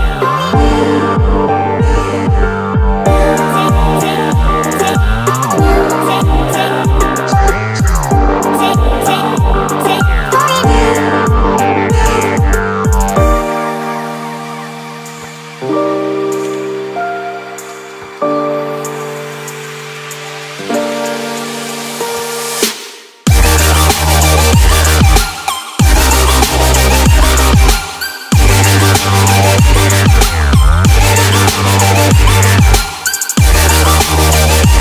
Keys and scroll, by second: 2.3 1, 5.1 1, 5.2 ., 5.3 2, 25.8 Escape, 28.8 Escape, 29.5 Escape, 32.8 Escape.